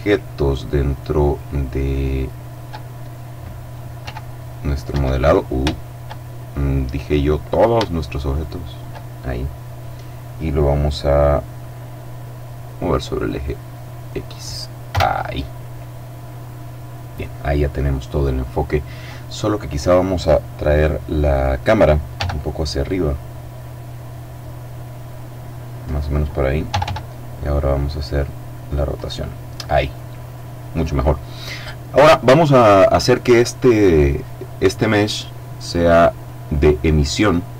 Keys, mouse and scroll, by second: 0.4 right click, 1.4 right click, 3.5 g, 4.4 Escape, 5.8-7.6 shift+middle drag, 7.9 shift+right click, 12.7 click, 14.3 KP_0, 19.3 right click, 20.1 right click, 21.6 g, 25.3 click, 26.2 r, 28.4 click, 31.2-31.8 scroll down 1, 32.0 right click, 33.4 click, 35.6 click, 37.2 click.